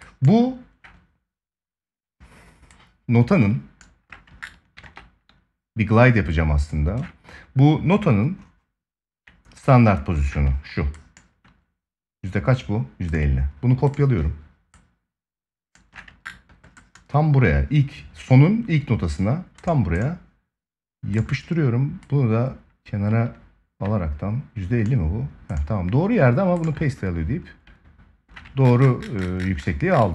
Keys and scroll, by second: 4.5 ctrl+s.